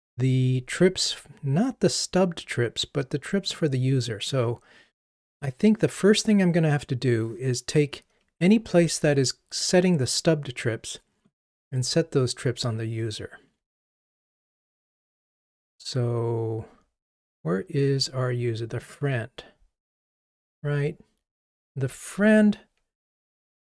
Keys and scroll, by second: 11.4 super+b.